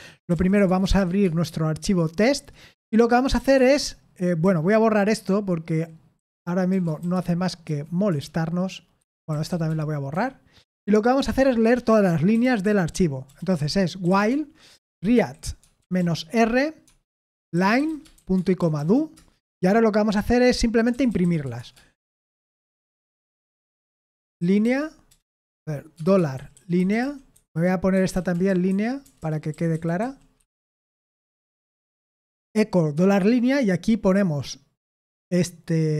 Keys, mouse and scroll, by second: 0.0-1.4 typing, 2.3 Return, 3.4 shift+g, 4.4-7.6 typing, 8.1 Return, 8.9-10.6 typing, 12.1-19.3 typing, 20.6-31.0 typing, 32.9 typing.